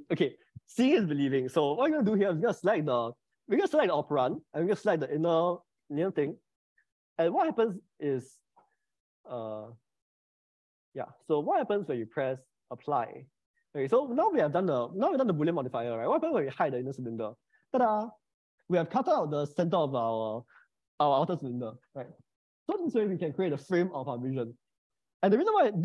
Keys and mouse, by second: 8.7 click, 9.8 click, 10.7 click, 11.9 click, 12.5-16.3 middle drag, 16.7 click, 17.5 middle click.